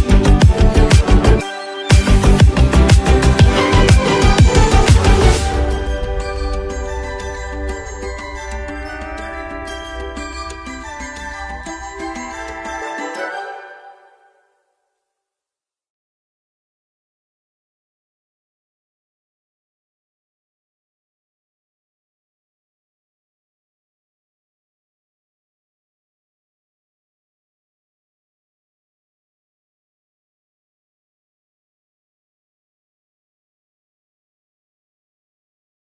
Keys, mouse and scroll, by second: 4.3 ctrl+s, 4.6 ctrl+click, 8.6-33.2 drag, 35.1 ctrl+s.